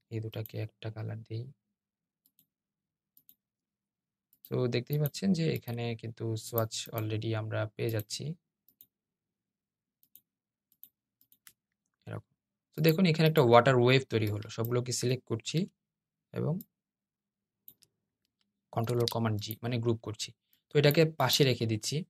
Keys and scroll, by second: 18.6 super+g.